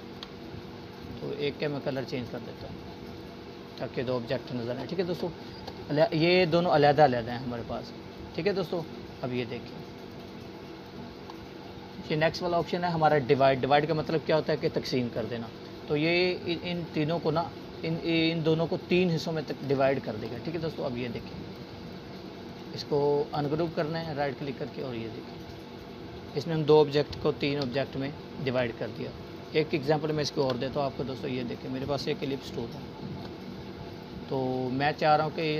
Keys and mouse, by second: 0.0-1.0 alt+drag, 6.8-9.0 drag, 22.6-23.0 click, 23.3 right click, 24.1-25.8 drag, 28.1 ctrl+z, 30.0 click, 31.2 Delete, 32.2 click, 33.2-34.0 alt+shift+drag.